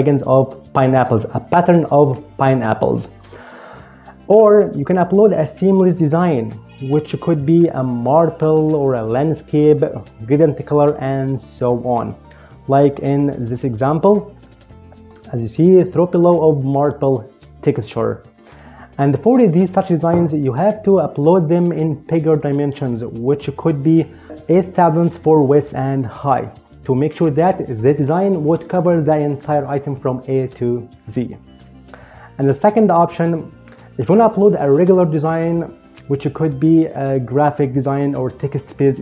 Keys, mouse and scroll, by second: 12.7 click, 13.3 click, 14.3 click.